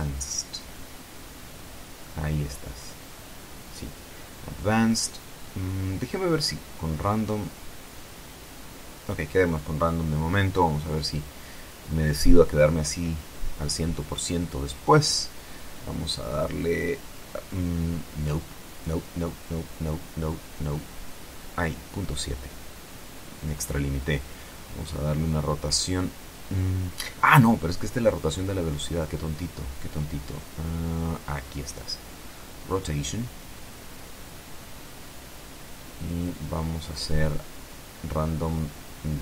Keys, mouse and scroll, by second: 3.7 click, 7.9 click, 14.6-18.7 drag, 19.1 click, 20.4 KP_Decimal, 20.9 KP_7, 21.2 KP_Enter, 24.4-26.1 drag, 31.4 click, 31.8-32.8 scroll down 1, 34.1 click, 36.3-39.2 drag.